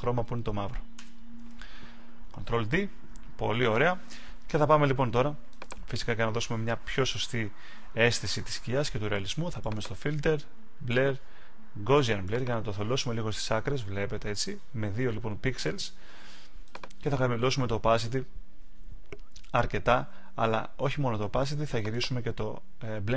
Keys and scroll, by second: 2.4 super+d.